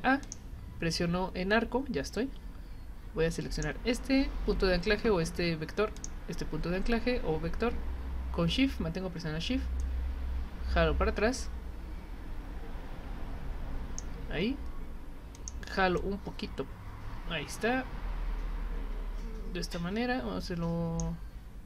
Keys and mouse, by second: 0.2 click, 3.5 click, 6.0 click, 9.8-14.0 drag, 15.3 click, 16.0-21.0 drag.